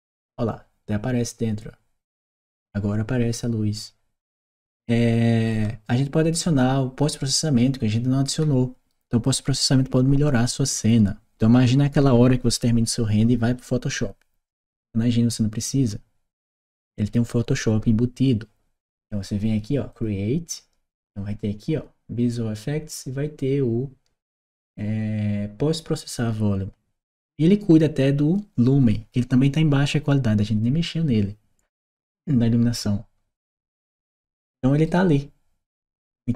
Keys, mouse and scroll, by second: 3.6-4.6 right drag, 6.2-8.7 right drag, 19.7 click, 31.6-33.4 drag, 33.7 right click.